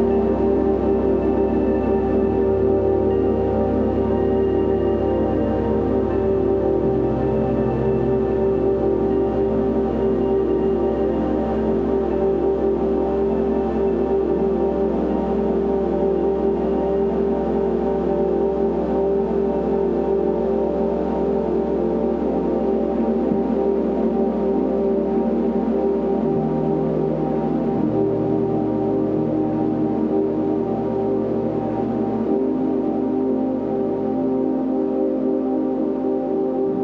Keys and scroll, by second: 3.5 super+u, 15.3 super+b, 21.6 super+l, 28.5 Return.